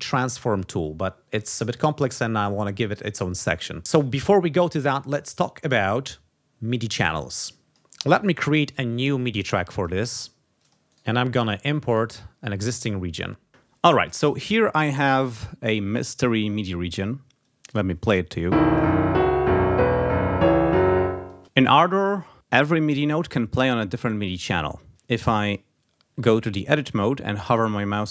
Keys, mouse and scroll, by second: 7.6 click, 8.2 scroll down 1, 8.6 right click, 9.7 click, 10.5 click, 10.9 right click, 11.9-13.3 drag, 17.2 click, 18.4 space, 21.1 space, 25.5 click, 26.2 e, 26.8 click.